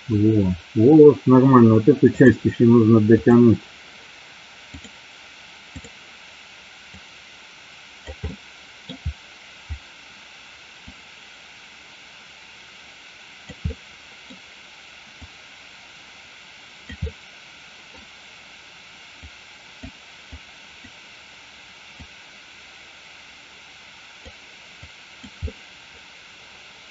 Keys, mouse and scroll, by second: 3.2 click, 4.8-6.2 drag, 7.0 click, 8.4 middle click, 10.9-13.6 drag, 13.7 middle click, 15.3-16.9 drag, 17.2 middle click, 19.4 click, 20.5 click, 22.1-24.3 drag, 24.9 click, 25.6-26.9 middle drag.